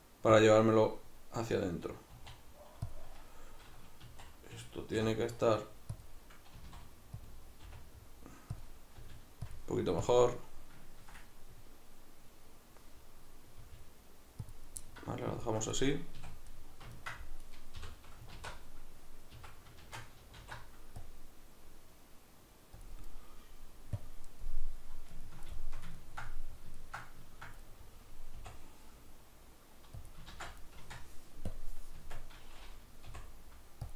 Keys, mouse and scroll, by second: 0.5 click, 2.1 e, 2.9 click, 4.1 s, 6.1 click, 6.5 s, 7.3 click, 7.7 r, 8.7 click, 9.0 g, 9.5 click, 10.1-13.6 ctrl+drag, 13.6 g, 14.5 click, 14.9-17.5 middle drag, 16.2 a, 17.5 right click, 17.8 l, 18.3 alt+e, 19.5 Escape, 19.9 shift+Tab, 20.4 alt+e, 22.9 click, 24.4-30.1 middle drag, 28.4 i, 30.1 click, 30.3 ctrl+z, 30.8 Tab, 31.5-33.9 drag, 32.0 Tab, 33.1 i.